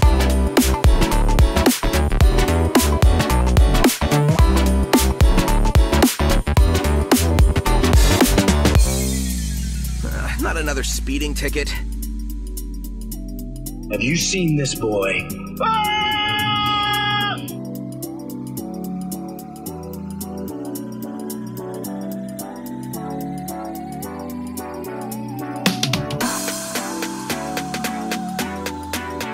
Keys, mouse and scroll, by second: 1.2 Tab, 1.6-3.3 middle drag, 3.8 shift+middle click, 5.8 g, 6.1 x, 8.2 click, 9.1 g, 9.4 x, 11.4 click, 11.4 typing, 12.0 middle click, 12.5 shift+middle click, 12.9 typing, 13.0 click, 13.6 click, 14.7 g, 14.8 y, 16.3 click, 17.0 click, 18.4 g, 18.5 y, 19.9 Escape, 20.5 middle click, 22.1 g, 22.2 y, 24.2 click, 24.2 typing, 24.5 click, 25.1 shift+click, 26.2 shift+click, 27.1 click, 27.8 shift+click, 28.6 g, 28.7 g.